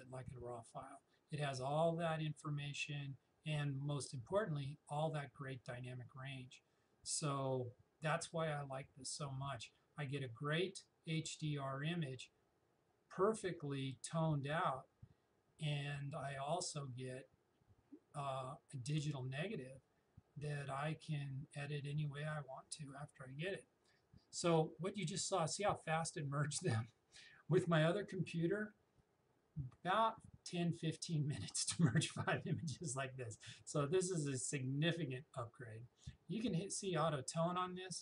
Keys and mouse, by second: 36.8 click.